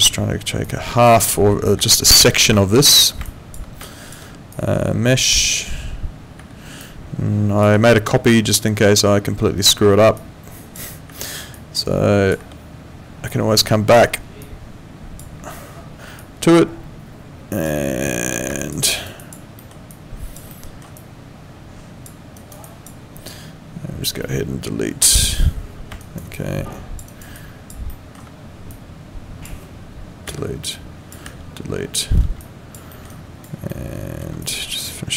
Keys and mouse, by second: 1.8 Delete, 2.6 middle click, 3.2 click, 6.4 Delete, 6.8 click, 7.7 Delete, 10.2 click, 11.1 Delete, 11.6 click, 12.4 Delete, 13.3 click, 14.0 Delete, 14.4 click, 15.3 Delete, 16.2 click, 17.7 Delete, 18.6 alt+click, 18.8 alt+right click, 19.2 alt+click, 19.6 alt+middle click, 19.9 alt+click, 20.9 alt+click, 22.4 alt+right click, 22.6 alt+click, 25.0 Delete, 26.0 alt+right click, 26.3 alt+click, 27.1 alt+right click, 27.3 alt+click, 27.9 alt+middle click, 28.7 click, 30.2 Delete, 30.7 click, 31.2 Delete, 32.4 alt+click, 32.9 alt+middle click, 33.1 alt+right click, 33.7 alt+middle click, 34.4 click.